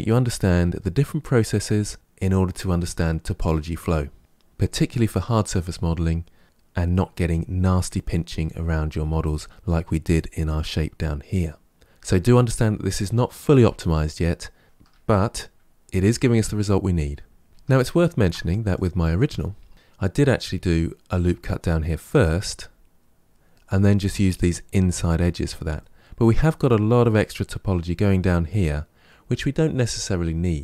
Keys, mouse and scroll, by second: 14.7 Tab, 15.6-16.0 scroll down 2, 16.0-17.5 middle drag, 17.5 Tab, 17.8-18.6 shift+middle drag, 18.6 click, 19.1 Tab, 19.6 shift+middle click, 25.7-28.7 shift+middle drag.